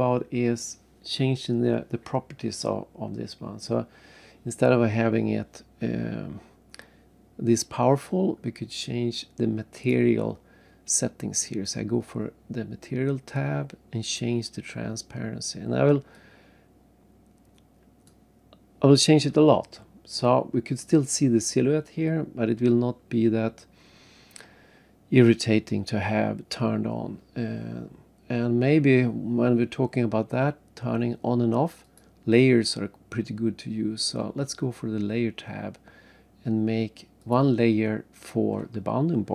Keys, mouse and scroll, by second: 2.6-3.1 scroll up 3, 9.8 click, 16.1 click, 31.8 click, 37.2 click.